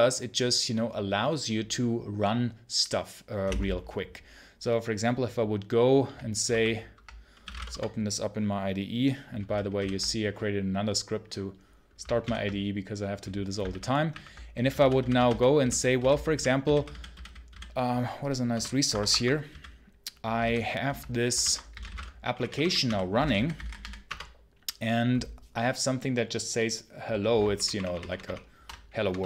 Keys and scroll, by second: 7.6 Return, 16.2 ', 18.4 Return, 19.5 ', 23.9 Return, 28.9 BackSpace.